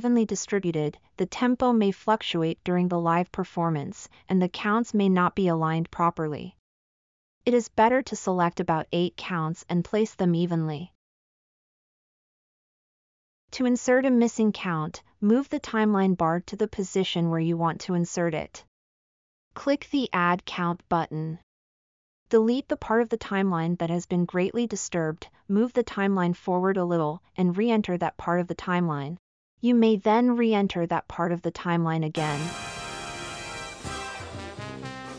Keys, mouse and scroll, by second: 13.2 space, 27.3-31.9 drag, 27.3-31.9 right drag, 34.4 space.